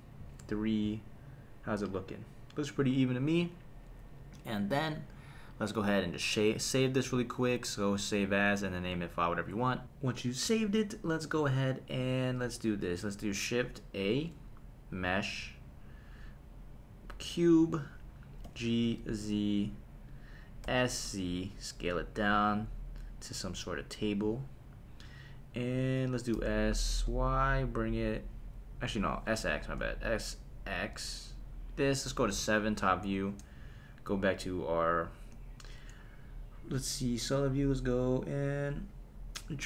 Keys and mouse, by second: 0.4 KP_3, 7.4-9.8 drag, 14.0 shift+a, 18.4 g, 18.8 z, 20.1 click, 20.6 s, 21.0 z, 24.0 click, 26.3 s, 26.9 y, 28.7 Escape, 29.5 s, 29.8 x, 31.7 click, 32.3 KP_7, 34.6 click, 36.8 g.